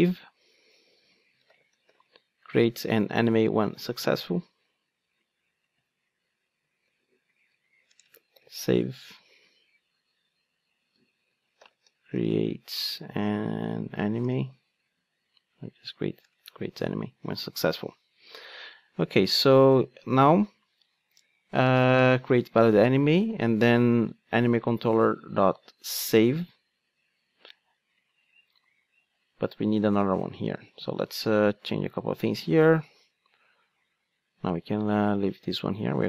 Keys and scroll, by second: 30.4 Tab, 33.2 super+x, 34.1 super+z.